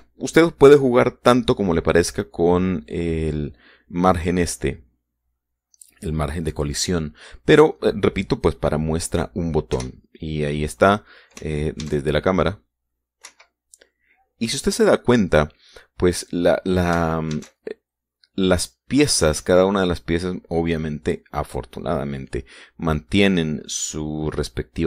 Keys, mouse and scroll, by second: 0.6 Escape, 7.9-8.4 scroll down 2, 8.4-8.9 scroll up 2, 9.2 scroll down 2, 10.5 KP_0, 11.6 scroll up 2, 11.9 scroll down 2, 12.6 alt+a, 14.1 Escape, 18.1 alt+a.